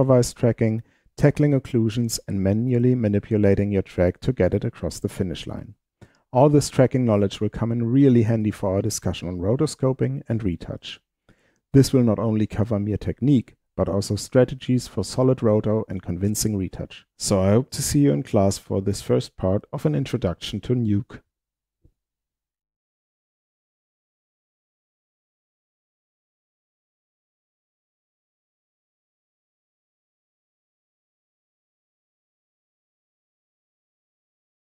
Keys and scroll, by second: 11.5-15.3 typing, 16.5-18.0 typing.